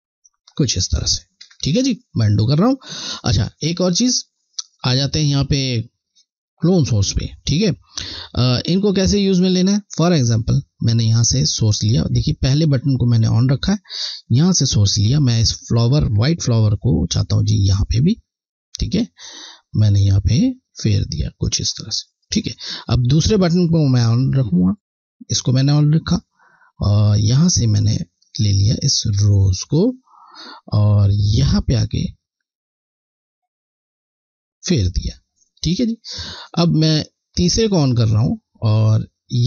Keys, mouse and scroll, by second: 4.9 click, 14.3 click, 15.7 alt+click, 24.3 click, 26.4 scroll, 26.6 scroll down 1, 27.4 scroll down 1, 28.8 alt+click, 29.5 scroll, 29.6 scroll up 1, 31.5 click, 31.8 click, 36.1 scroll, 37.5 click, 38.7-39.4 scroll down 1.